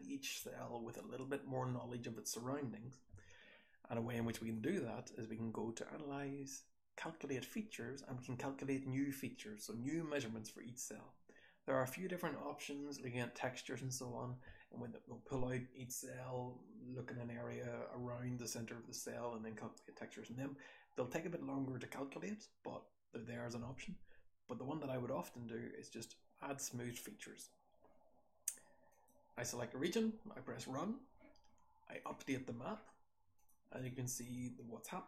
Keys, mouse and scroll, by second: 0.3 h, 2.6-10.6 scroll up 4, 4.5 click, 10.6-11.2 scroll up 1, 11.2-15.9 scroll up 1, 15.9-19.5 scroll up 1, 19.5-26.6 scroll up 1, 26.6 scroll up 1.